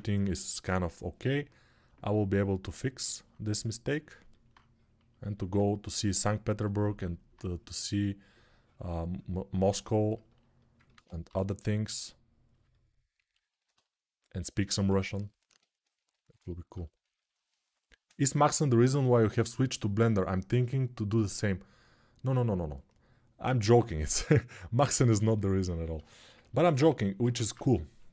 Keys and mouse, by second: 1.8 alt+click, 2.4-3.9 alt+drag, 4.1 alt+click, 4.3-12.7 ctrl+drag, 11.0 g, 12.9 click, 13.0 click, 13.1 alt+shift+click, 13.9 right click, 14.0-28.1 alt+drag.